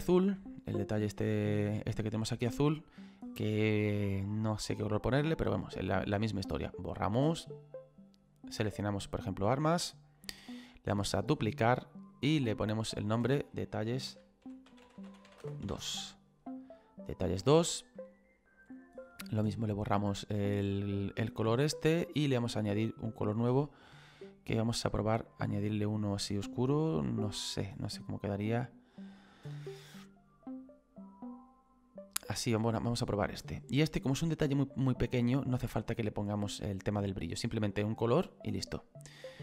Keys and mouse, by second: 6.6 click, 7.7 click, 9.2 click, 11.2 click, 15.4 space, 15.7 2, 16.8 click, 19.8 click, 23.4 click, 24.8 click, 30.3 click, 33.9 click.